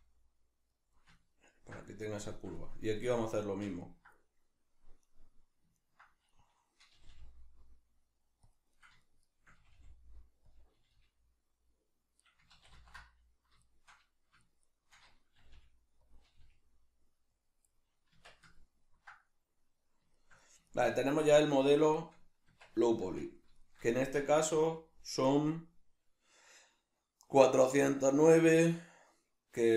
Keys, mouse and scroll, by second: 0.9 click, 1.2-5.0 ctrl+middle drag, 5.0 right click, 5.8 ctrl+right click, 6.3-8.5 middle drag, 7.0 g, 8.5 click, 8.8 right click, 9.0 shift+right click, 9.2 shift+right click, 9.6 g, 10.6 click, 10.8 g, 12.3 right click, 12.6 ctrl+z, 13.6 shift+right click, 14.4 shift+right click, 14.6 shift+right click, 15.4 g, 16.2 click, 16.2 g, 17.4 click, 17.7-21.6 middle drag, 18.1 Tab, 22.5 Tab, 23.6 shift+middle click, 24.0 Tab.